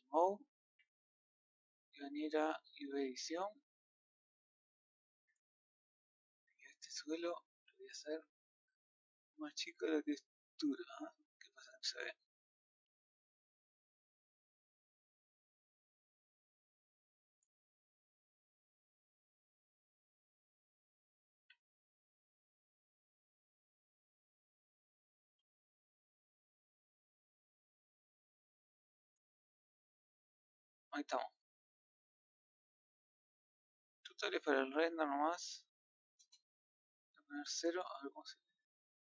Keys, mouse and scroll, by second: 13.0-13.6 scroll up 1, 19.2 scroll down 1, 22.9 click, 25.7 scroll up 1, 27.1-27.5 scroll down 1, 38.4 scroll up 1.